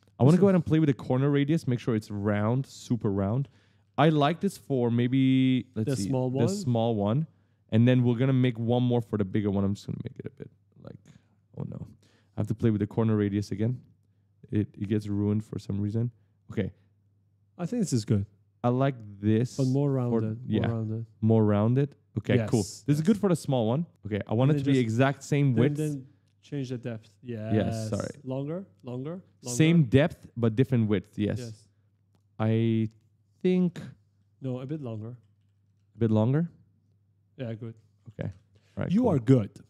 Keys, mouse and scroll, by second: 0.7 click, 3.0 right click, 9.2 click, 13.0 click, 14.4 click, 19.1 click, 21.7 click, 23.5 click, 23.8 click, 23.9-25.6 typing, 24.1 right click, 26.2 click, 28.8 right click, 28.9-30.4 typing, 31.3 click, 32.8 click, 33.4 right click, 36.6 click, 37.3-38.8 typing.